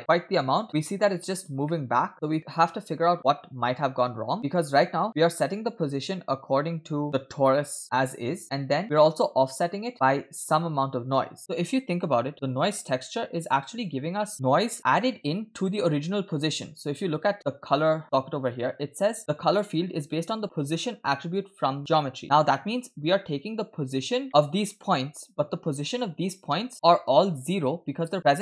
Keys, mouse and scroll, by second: 1.7-2.8 middle drag, 4.4 click, 5.1 middle click, 5.1 scroll down 2, 6.3 click, 7.1 middle click, 9.9 middle click, 10.4-11.4 drag, 11.4 middle click, 11.4-11.9 scroll up 2, 11.9-12.5 scroll up 1, 12.5 click, 13.1-13.6 drag, 13.8-14.4 drag, 14.3 middle click, 22.4 click, 22.9 scroll down 1, 23.7-24.2 scroll down 3, 24.3 middle click, 24.7 click.